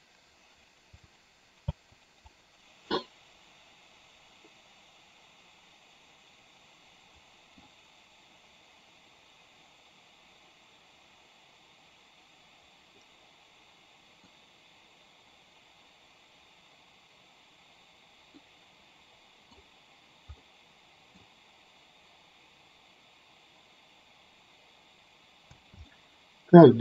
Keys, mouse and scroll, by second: 1.7 space, 2.5-7.7 middle drag, 13.1-14.3 middle drag, 18.5-19.7 middle drag, 20.6-21.2 middle drag, 25.7 space, 26.0-26.7 middle drag.